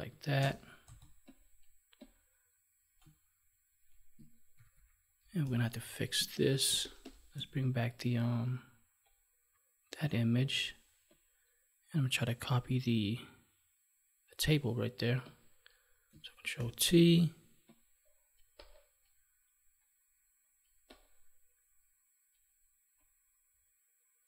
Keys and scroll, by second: 4.5 ctrl+=, 5.4 space, 16.5 ctrl+t.